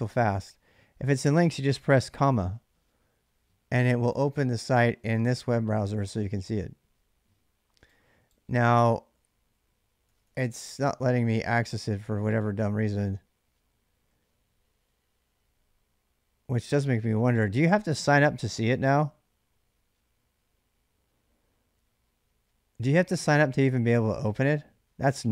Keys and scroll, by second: 9.9 BackSpace, 10.0 BackSpace, 10.5 BackSpace, 10.6 BackSpace, 11.0 Return.